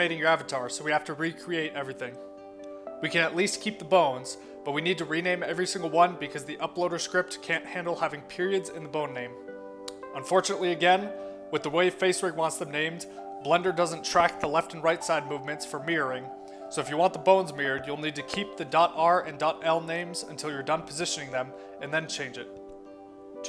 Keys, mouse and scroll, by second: 1.1 middle click, 4.3 click, 4.8 scroll up 1, 6.6 click, 11.0 click, 11.5 click, 13.0 click, 16.4 click, 18.1 click, 19.7 click, 21.0 click, 21.6 click, 22.3 scroll down 2, 22.7-23.0 scroll up 2.